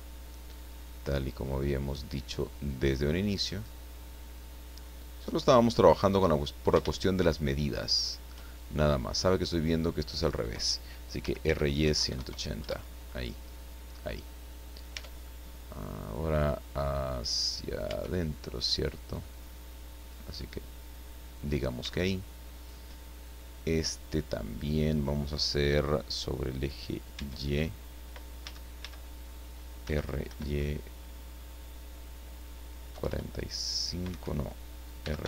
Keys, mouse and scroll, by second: 0.2-2.1 drag, 2.7-6.2 drag, 6.3-6.6 scroll up 1, 7.0-8.4 shift+middle drag, 11.2 r, 11.4 y, 11.8 KP_1, 12.1 KP_0, 12.6 KP_Enter, 14.9 Tab, 15.2 click, 17.8 Tab, 19.3 click, 20.4 scroll up 1, 21.8 Tab, 22.6 right click, 27.1 Tab, 28.4 a, 29.8 r, 30.2 y, 32.9 KP_4, 34.1 Escape, 35.0 r, 35.2 y.